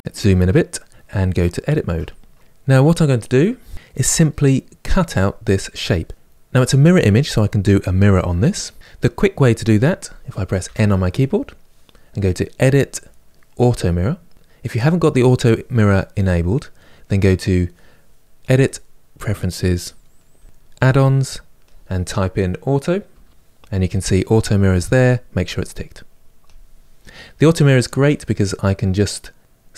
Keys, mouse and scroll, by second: 1.5 Tab, 10.3 n, 12.3 click, 13.2 middle click, 14.1-15.2 drag, 18.1-20.4 drag.